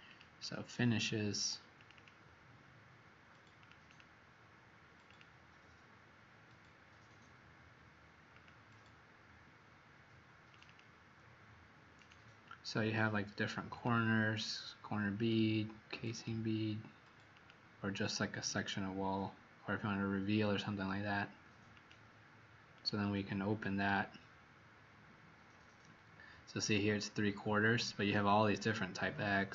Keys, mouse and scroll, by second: 0.3 click, 1.7 click, 1.9 click, 3.5 click, 3.8 click, 5.0 click, 10.6 click, 11.9 click, 22.8 click.